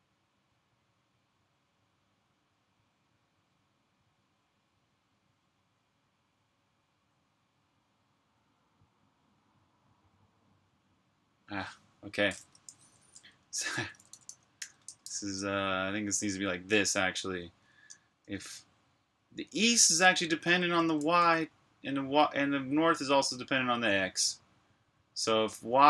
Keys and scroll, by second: 12.6-14.9 typing, 18.1 y, 19.8 space, 20.9 typing, 23.2 space.